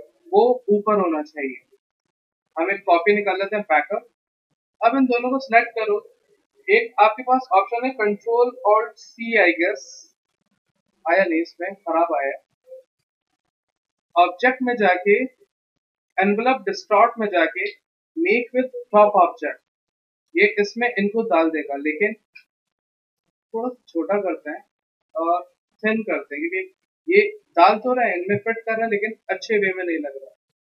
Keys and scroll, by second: 0.5 ctrl+shift+], 9.0 ctrl+alt+c, 10.7 ctrl+z, 21.5 ctrl+z.